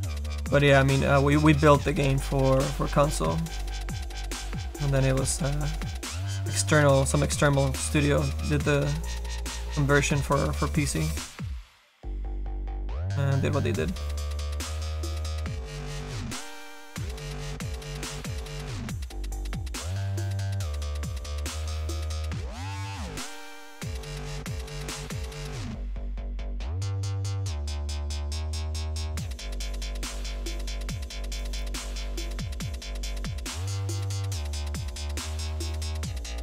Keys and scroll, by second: 2.6 s.